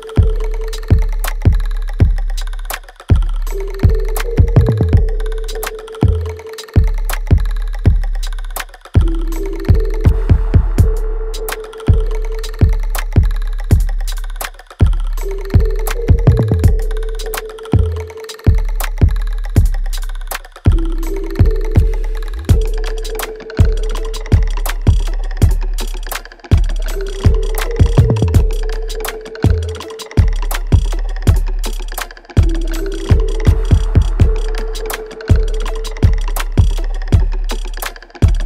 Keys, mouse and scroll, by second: 0.0-1.9 scroll down 1, 8.3 click, 9.6 alt+right click, 10.1 alt+click, 10.7-12.7 alt+middle drag, 12.7 click, 20.3 click, 20.3-23.4 alt+drag, 24.6 alt+middle click, 25.1-26.6 alt+drag, 27.7-29.2 alt+drag, 31.1 shift+click, 31.3-34.7 alt+drag, 35.9-37.9 alt+drag, 38.2-38.4 alt+drag.